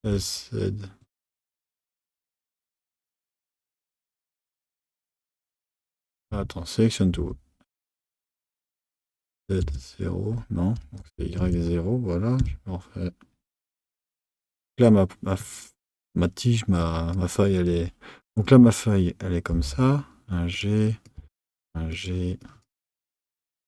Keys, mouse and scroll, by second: 16.8 click, 18.2 click, 19.5 g, 20.9 click, 21.2 g, 22.4 click, 22.7 g.